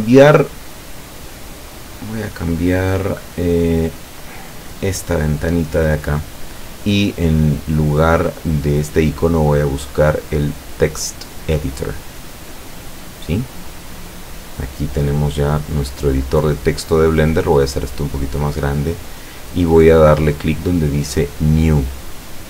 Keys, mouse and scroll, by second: 2.0 click, 3.6-6.3 drag, 8.2 click, 12.6 click, 16.4-19.0 drag, 22.0 click.